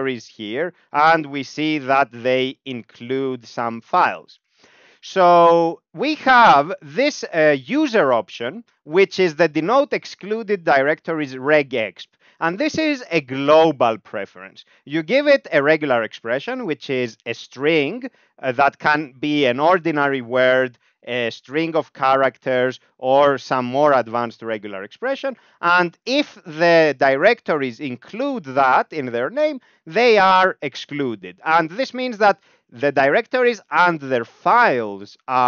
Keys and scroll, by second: 0.0 Up, 0.3 Tab, 1.3 Down, 1.4 Down, 1.6 Down, 1.9 Tab, 2.5 Up, 2.7 Up, 2.8 Up, 4.9 Up, 5.1 Up, 5.3 Up, 6.9 ctrl+alt+space, 11.1 ctrl+g.